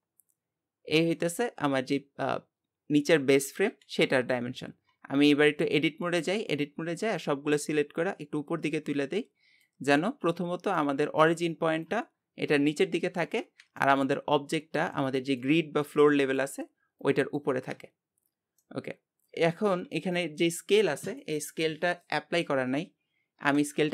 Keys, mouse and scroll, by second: 1.0 scroll up 1, 3.7 KP_1, 4.7 Tab, 5.1-6.6 scroll up 2, 7.2-10.2 drag, 10.4 Tab, 10.7-18.0 middle drag, 18.3 scroll down 2, 18.6-23.8 middle drag.